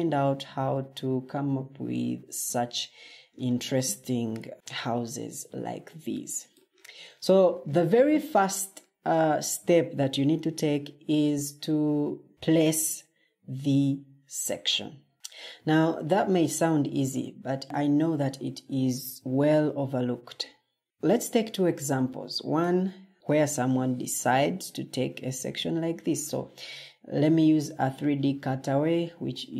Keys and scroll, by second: 4.2 o, 24.5 Escape.